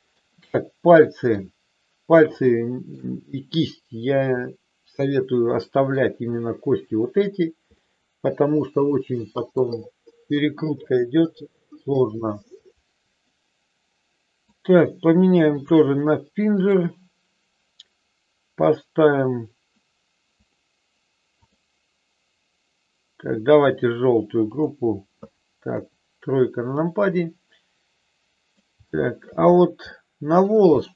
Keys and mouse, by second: 0.8 middle click, 2.5 shift+middle click, 5.5 middle click, 7.8-9.5 middle drag, 14.4-15.7 drag, 16.5 click, 20.3 click, 21.4-23.7 drag, 24.5 click, 25.7 KP_3, 26.8-28.4 middle drag, 28.9 shift+middle click, 29.9 middle click, 30.7 shift+middle click.